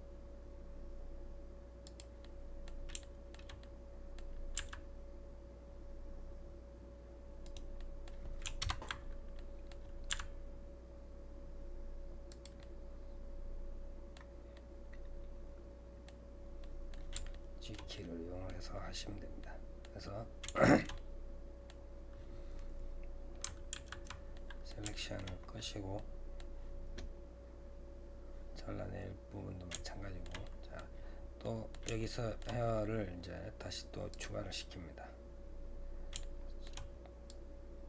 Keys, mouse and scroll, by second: 2.3-4.6 middle drag, 4.6 g, 7.8 middle click, 8.6 ctrl+KP_Add, 9.4 middle click, 10.1 g, 12.6-14.4 middle drag, 14.4 scroll down 1, 14.6-19.1 middle drag, 19.1-19.4 scroll down 2, 19.4 middle click, 20.1-20.5 scroll up 2, 20.5-23.7 middle drag, 23.7 alt+a, 24.4-25.6 middle drag, 25.6-26.0 scroll up 2, 26.0-29.0 middle drag, 29.8-34.1 shift+middle drag, 34.1-36.2 drag, 36.2-37.3 shift+middle drag, 37.3-37.8 drag.